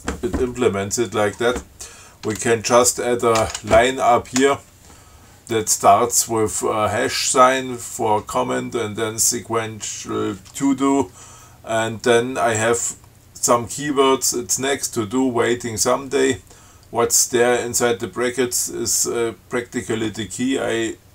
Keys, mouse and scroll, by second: 3.6 ctrl+y, 4.6 Return.